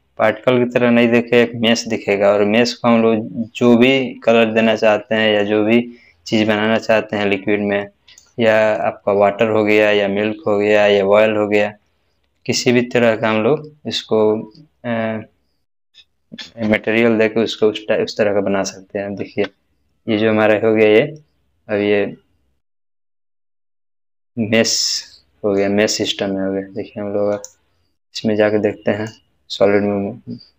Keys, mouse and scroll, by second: 2.6 click, 2.8 scroll down 1, 4.0-5.5 middle drag, 5.8 scroll up 1, 7.2-8.5 shift+middle drag, 19.2 middle click, 19.2 space, 23.1-23.7 middle click, 23.9-24.3 scroll up 1, 24.7-25.0 scroll down 1, 25.0-25.7 middle drag, 27.3 click, 28.7-29.3 middle drag.